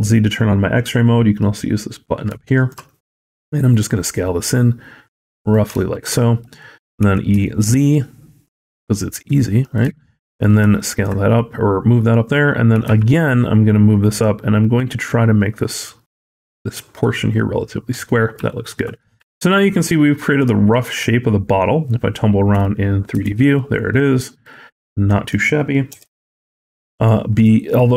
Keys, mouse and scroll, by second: 2.3 shift+middle click, 2.9 s, 5.8 shift+middle click, 6.0-6.6 scroll up 4, 6.9 e, 9.9 shift+middle click, 10.2 scroll up 2, 10.6 shift+middle click, 10.9-11.7 scroll up 2, 12.6 e, 17.7-18.2 scroll down 10, 18.3 shift+middle click, 18.8-19.1 scroll up 3, 19.1 shift+middle click, 20.5-21.7 scroll down 4, 21.7 middle click, 23.1 alt+z, 23.4 middle click, 24.3 scroll up 2, 24.7 middle click, 25.8 KP_1, 26.4 alt+z, 26.8-27.9 shift+scroll up 2, 26.9 shift+middle click, 27.9 scroll up 2.